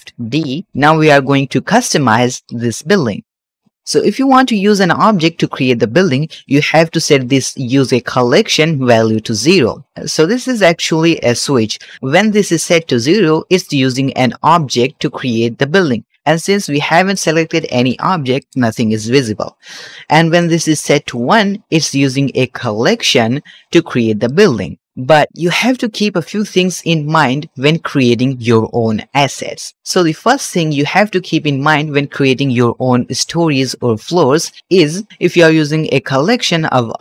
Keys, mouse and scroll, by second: 0.7-1.8 shift+drag, 0.7 shift+middle click, 1.8 shift+middle click, 1.9 shift+click, 2.0 shift+middle click, 2.3 scroll up 2, 2.6 middle click, 2.8 scroll down 1, 3.0 shift+middle click, 3.5 click, 9.1 click, 17.0-18.3 drag, 20.3 click, 23.0-24.2 drag, 35.1 shift+middle click, 35.1-35.8 scroll down 3, 35.9-36.3 shift+middle drag, 36.4-36.9 scroll up 4, 36.9-37.0 shift+middle drag.